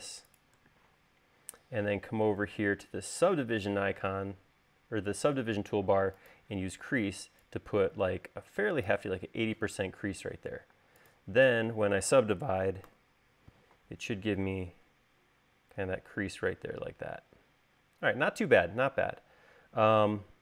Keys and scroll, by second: 10.9 space, 13.0 u.